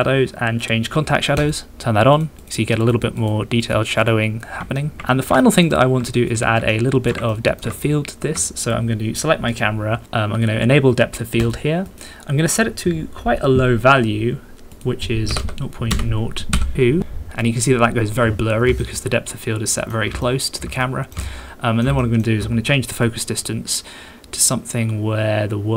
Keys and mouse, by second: 1.4 click, 1.8 middle click, 2.1 click, 2.4 click, 2.8 click, 2.9 middle click, 3.7 click, 4.0 click, 4.2 middle click, 4.8 shift+click, 4.9 shift+middle click, 4.9 shift+click, 5.1 ctrl+shift+click, 5.4 shift+click, 6.3 click, 6.7 shift+click, 7.3 ctrl+middle click, 7.8 shift+middle click, 11.4 middle click, 14.7-17.0 middle drag, 18.8-19.9 shift+middle drag, 20.2 ctrl+middle click, 20.8 shift+middle click, 21.2 ctrl+middle click, 22.0 shift+middle click, 23.0-25.7 middle drag.